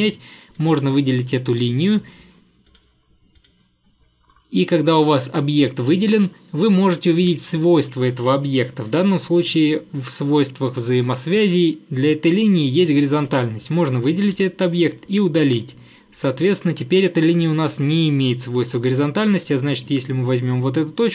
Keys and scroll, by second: 14.4 Delete.